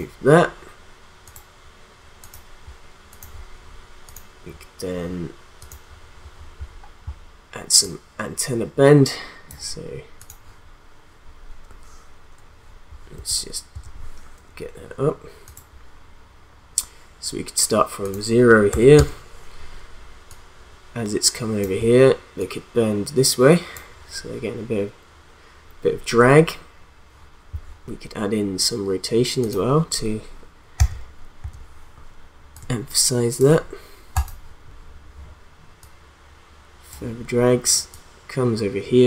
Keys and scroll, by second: 13.1 u, 18.7 0, 18.9 Return, 30.8 u.